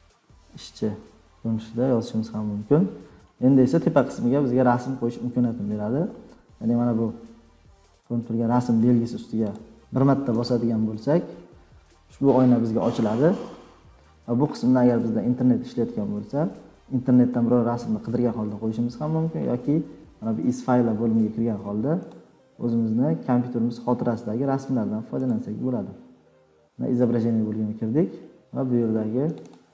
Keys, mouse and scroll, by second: 0.0-2.5 typing, 9.5-13.2 drag, 22.1-24.9 drag, 25.3-27.6 drag, 28.2 scroll, 28.7-29.1 scroll, 29.1 click, 29.3 click, 29.5 click.